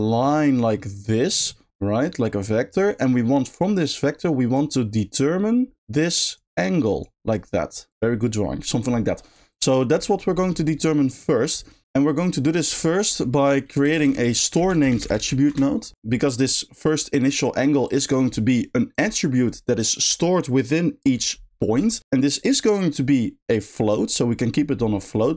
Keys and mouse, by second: 4.6-7.1 drag, 9.5 ctrl+click, 11.3 middle click, 12.4 middle click, 12.8 click, 13.1 g, 17.9 click.